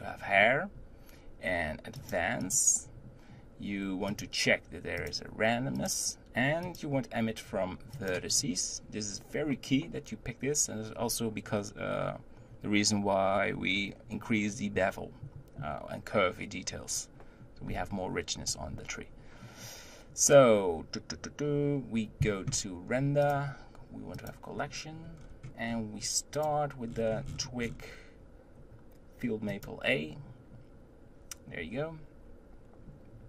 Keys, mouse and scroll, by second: 2.0 click, 2.7 click, 4.1-4.4 drag, 5.0-10.6 drag, 23.2-25.1 drag, 25.1-26.4 scroll down 7, 26.4-29.4 drag.